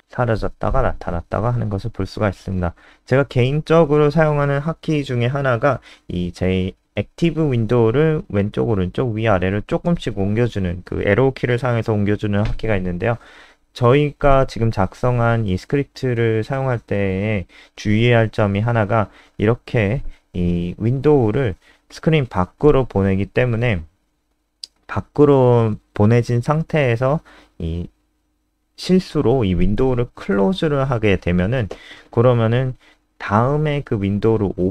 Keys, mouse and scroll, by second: 2.7 click, 6.5 alt+super+Left, 6.9 alt+super+Left, 7.7 alt+super+Right, 9.3 click, 14.0 KP_0, 18.2 alt+super+Up, 18.5 alt+super+Up, 18.9 alt+super+Up, 21.2 click, 25.6 KP_0.